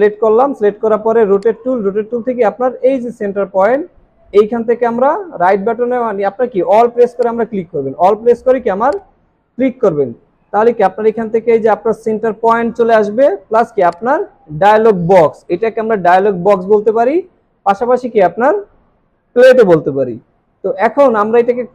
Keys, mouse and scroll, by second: 3.1-4.4 alt+scroll up 1, 7.1 alt+click.